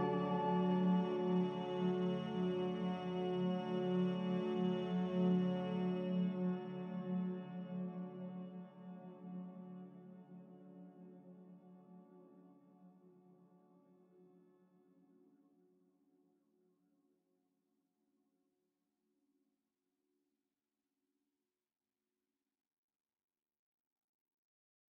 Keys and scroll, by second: 4.7 z, 7.2-7.9 typing, 16.6 ctrl+z.